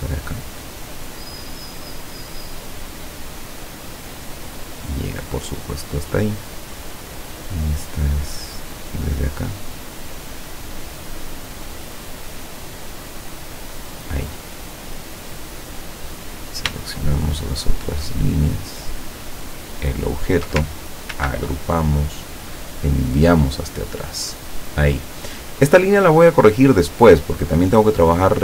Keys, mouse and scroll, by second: 1.7 click, 2.4-3.0 drag, 4.6 click, 9.1 click, 10.2 click, 13.7 click, 15.5 click, 16.9-18.8 shift+drag, 19.5 shift+click, 21.2 ctrl+g, 23.3 click.